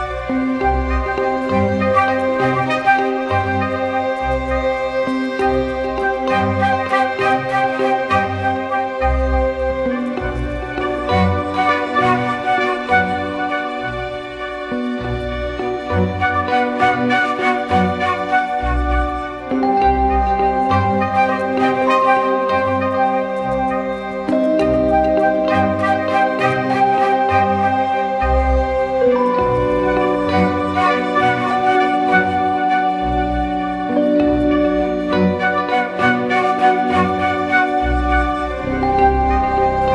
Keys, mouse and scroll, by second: 0.0-0.2 typing, 10.8 double click, 31.5-32.2 typing, 33.9 typing, 37.0 typing.